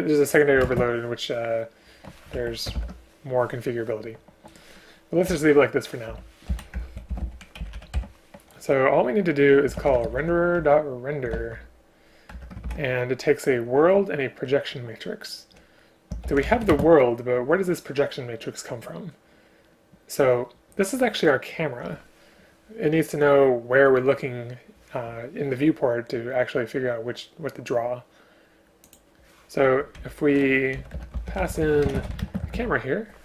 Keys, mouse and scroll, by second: 0.7 ctrl+space, 2.4 Escape, 2.8 ctrl+p, 5.3 Escape, 6.1 Escape, 6.5 End, 6.8 Return, 7.1 shift+Home, 7.2 Delete, 7.6 Down, 7.7 Down, 7.9 End, 12.3 Return, 12.7 ctrl+p, 16.7 space, 30.0 Left, 31.0 Return, 31.9 space, 32.3 space.